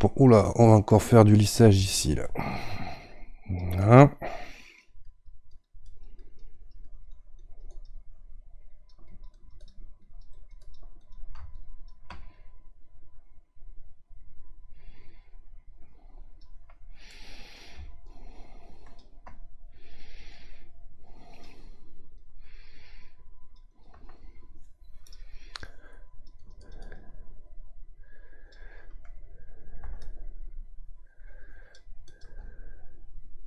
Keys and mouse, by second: 17.1 middle click, 18.0-33.4 ctrl+drag.